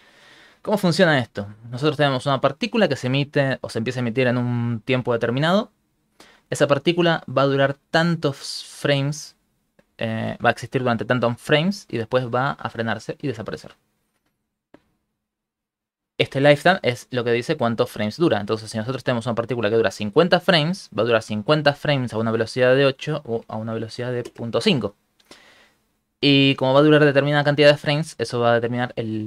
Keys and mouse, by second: 15.3 shift+middle click, 17.1 ctrl+middle click, 18.4 shift+middle click, 18.8 ctrl+middle click, 19.6 ctrl+middle click, 20.9 ctrl+middle click, 21.8 ctrl+middle click, 22.8 click.